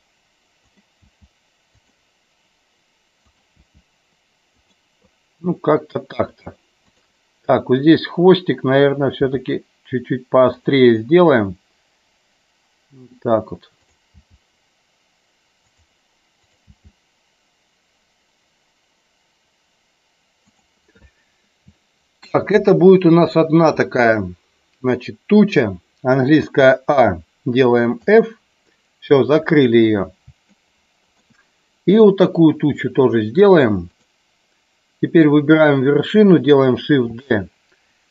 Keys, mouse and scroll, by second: 0.8 click, 1.0 g, 1.7 click, 3.2 click, 3.7 g, 4.5 click, 9.2 g, 10.5 click, 14.1 g, 15.7 click, 16.6 click, 16.7 g, 21.9 shift+middle click, 26.5 a, 28.0 f, 30.6 shift+middle click, 34.0 click, 37.1 shift+d.